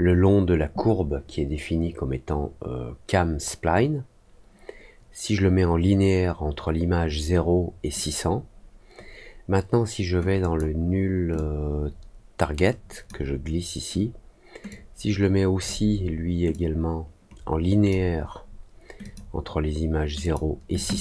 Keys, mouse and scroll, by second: 10.3 click, 11.3-13.0 drag, 14.6 click, 16.4-17.8 drag, 19.0 click, 20.2 click.